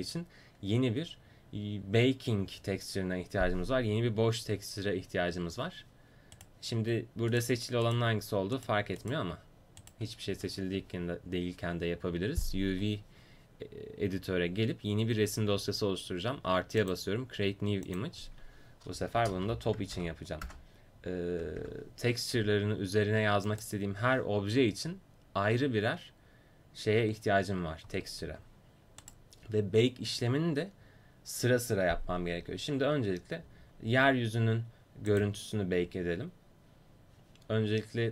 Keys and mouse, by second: 6.4-12.5 right drag, 10.4 a, 16.8-23.6 drag, 29.1-33.9 right drag, 35.1-37.7 drag.